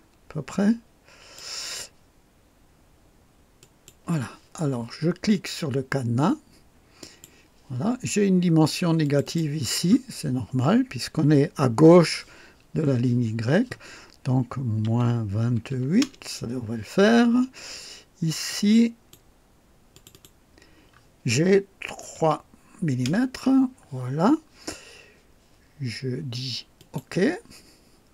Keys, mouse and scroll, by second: 3.5 click, 6.9 click, 9.0 click, 14.8 -, 15.0 KP_Subtract, 15.3 KP_2, 15.6 KP_8, 16.0 KP_Enter, 16.0 Return, 18.4-19.2 drag, 19.9 click, 22.1 KP_3, 23.0 Return, 26.7 click.